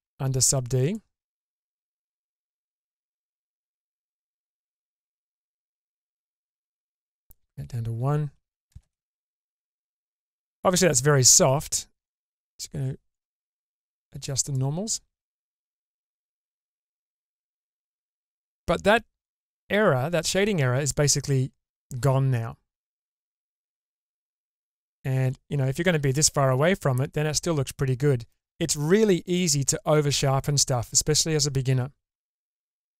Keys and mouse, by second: 0.8 click, 2.6-4.8 drag, 6.4 click, 8.7 shift+space, 9.3-10.5 middle drag, 12.0 click, 13.2-14.5 drag, 15.4-16.6 middle drag, 17.5-19.2 middle drag, 20.9-23.8 middle drag, 24.8-28.3 middle drag.